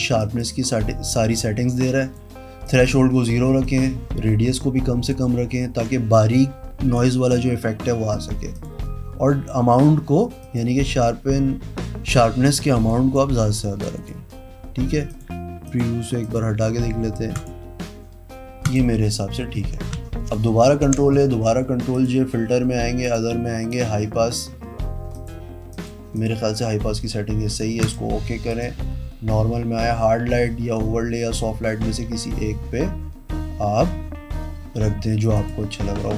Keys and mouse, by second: 0.4 click, 1.2 click, 2.8 click, 3.8 click, 6.3 click, 8.8 click, 10.6 click, 13.1 click, 14.1 click, 15.3 click, 15.9 click, 16.4 click, 17.6 click, 18.8 click, 20.4 ctrl+a, 21.0 ctrl+j, 22.1 click, 23.2 drag, 23.9 click, 25.4 click, 26.3 click, 28.0 click, 28.7 click, 35.6 click.